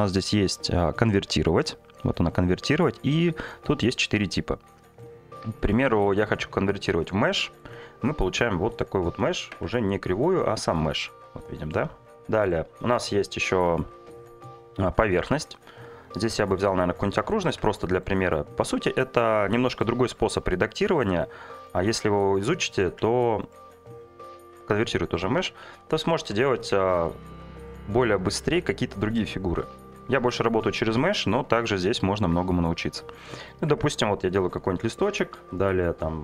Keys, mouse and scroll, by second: 5.5-7.0 right drag, 7.7 Tab, 9.5 Tab, 10.3 Tab, 12.2 Tab, 13.0 Delete, 14.0 shift+a, 17.5 Tab, 20.3 g, 20.5 z, 21.6 click, 23.0 Tab, 23.5-24.6 right drag, 24.8 middle drag, 25.4 Tab, 26.2 1, 27.0 click, 30.4 f, 30.8 2, 31.4-32.5 f, 33.7 Tab.